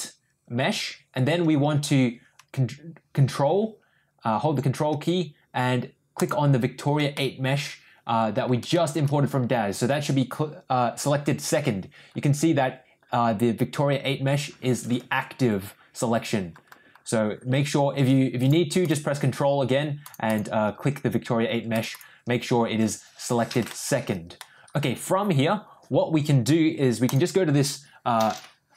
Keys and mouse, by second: 6.1 ctrl+click, 7.1-8.4 middle drag, 8.7 shift+middle drag, 18.8 ctrl+click, 20.3 ctrl+click, 21.9 ctrl+click, 23.7-24.1 shift+middle drag, 24.3 middle click, 24.8 middle click.